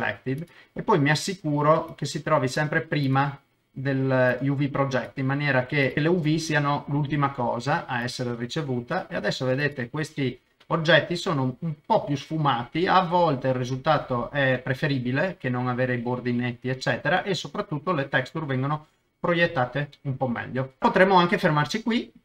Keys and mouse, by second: 0.4 click, 1.9 click, 3.0 click, 4.3 click, 9.6 click, 10.2-13.9 middle drag, 14.6-17.4 middle drag, 17.5-19.4 middle drag, 19.5 shift+middle click, 19.9 middle click, 20.9 middle click, 21.5 shift+middle click, 22.0 middle click.